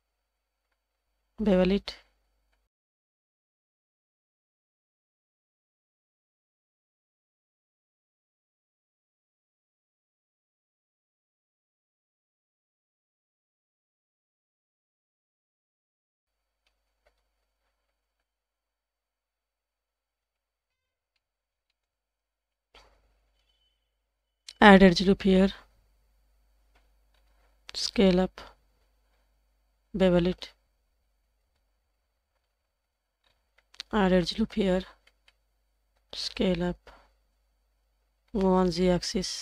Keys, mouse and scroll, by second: 5.5 Tab, 5.7 scroll down 1, 5.9 middle drag, 6.3-6.9 scroll up 2, 6.7 Tab, 7.2-7.6 shift+middle drag, 7.9 alt+click, 8.2 g, 10.1 alt+click, 10.5 g, 11.9 Tab, 13.5 alt+click, 14.0 g, 16.0 Tab, 17.6 alt+click, 20.6 Tab, 20.9 scroll down 2, 21.2 middle drag, 21.5 scroll up 2, 21.7 shift+middle click, 22.9 click, 23.4 Tab, 27.1 scroll up 1, 27.5 s, 32.4-33.2 scroll down 2, 33.2 scroll up 2, 34.0 ctrl+r, 36.2 s, 38.3 g.